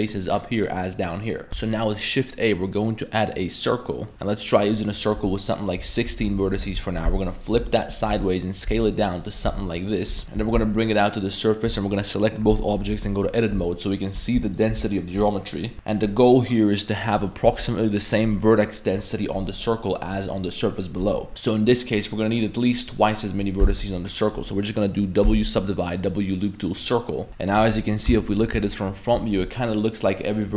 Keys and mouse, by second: 0.3 middle click, 0.8 right click, 1.1 middle drag, 1.5 shift+a, 3.7-4.1 middle drag, 4.9-5.9 drag, 6.1 Tab, 6.2 1, 6.6 r, 8.1 s, 8.7 z, 9.0 middle drag, 9.5 s, 9.9 middle drag, 10.2 Tab, 10.4 ctrl+z, 10.4 g, 12.2 shift+right click, 12.5 Tab, 12.7 middle click, 12.9 1, 13.1 middle drag, 14.5 alt+right click, 15.5 middle click, 15.7 2, 17.1 middle drag, 17.5 1, 19.0 middle click, 21.3 middle click, 22.1 middle click, 22.5 middle click, 23.6 w, 25.2 w, 27.3 middle click, 27.3 KP_1, 27.3 KP_3, 28.3 ctrl+KP_1, 29.3 middle click.